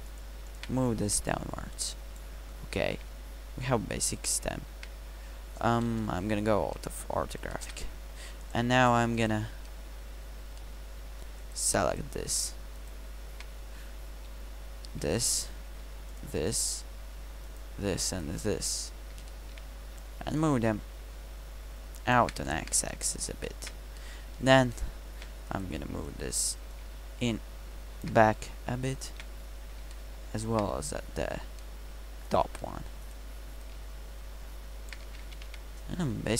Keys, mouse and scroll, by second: 5.9 KP_5, 26.8-28.1 middle drag, 32.7 middle click, 33.7 middle click, 35.1 a, 35.3 a, 35.5 Tab, 36.2 KP_Decimal.